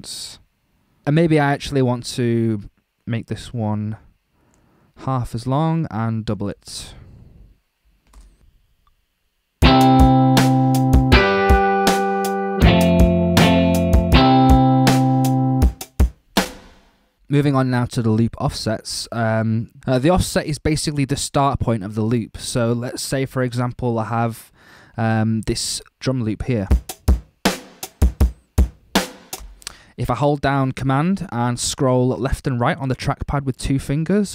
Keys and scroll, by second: 8.2 space, 16.5 space, 26.6 space, 29.3 space.